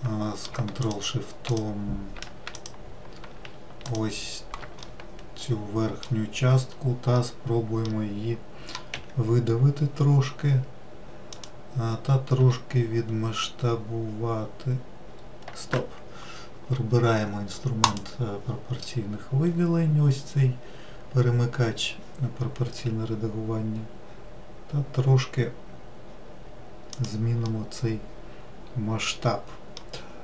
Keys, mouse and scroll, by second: 1.0 ctrl+shift+click, 1.7 ctrl+shift+click, 2.7 click, 4.0 ctrl+shift+click, 5.0-6.7 middle drag, 6.7-7.3 scroll up 1, 7.3-9.1 middle drag, 9.1 e, 12.5 s, 18.0 click, 22.9 s, 27.6-30.2 middle drag.